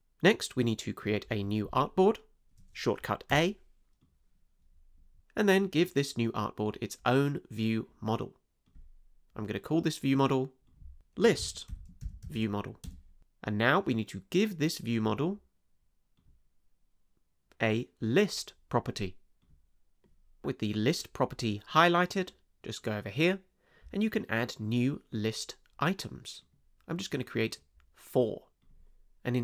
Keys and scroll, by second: 3.3 a, 11.0-12.7 typing, 12.8 Return.